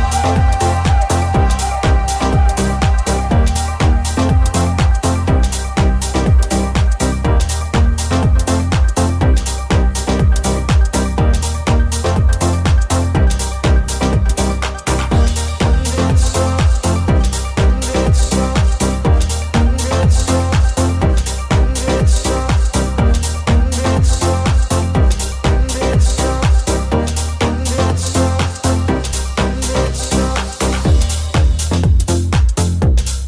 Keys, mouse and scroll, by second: 0.4 alt+z, 8.9 right click, 9.0-11.6 middle drag, 11.6 shift+right click, 11.7-17.5 shift+middle drag, 17.5 right click, 17.5 middle click, 18.4 right click, 18.5-21.7 middle drag, 18.6 e, 20.3 w, 21.7 right click, 21.8-28.5 middle drag, 24.7 w, 28.5 shift+right click, 28.6-30.3 shift+middle drag, 28.8 g, 30.3 right click, 30.3-33.2 middle drag, 30.7 right click, 30.9 g.